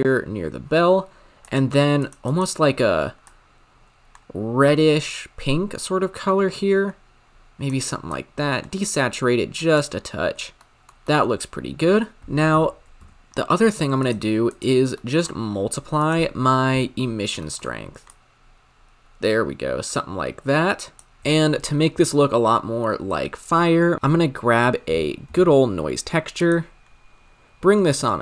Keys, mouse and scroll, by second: 1.5-2.0 drag, 2.3 click, 10.5 scroll down 8, 10.7 middle click, 10.9-14.1 drag, 14.1 shift+a, 14.9 middle click, 15.2-16.1 scroll up 8, 16.1-17.5 drag, 17.5 middle click, 17.6-18.1 scroll up 2, 18.1-26.5 drag.